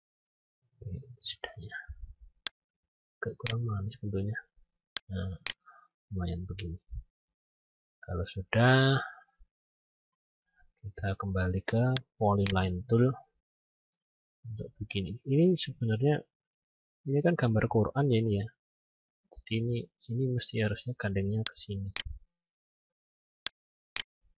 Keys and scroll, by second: 9.2 F9.